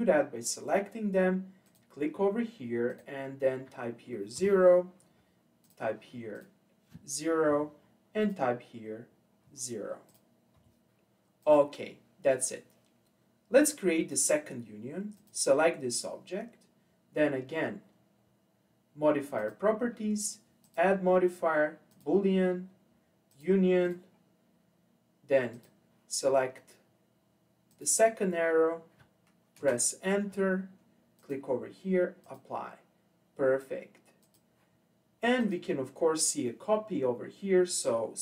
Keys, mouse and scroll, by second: 1.7 click, 2.9-5.7 drag, 6.3-8.3 drag, 9.4 0, 10.1-11.5 drag, 14.1 click, 15.1 click, 19.4 click, 22.0-23.4 drag, 23.8 click, 25.5 click, 29.6 Return, 31.2-34.3 drag, 35.4 click.